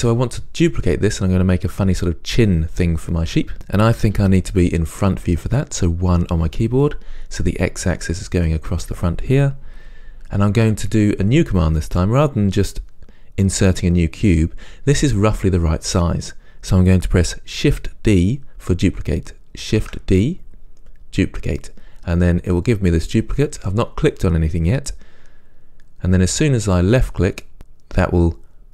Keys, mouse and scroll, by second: 6.2 KP_1, 20.0 shift+d, 27.5 click.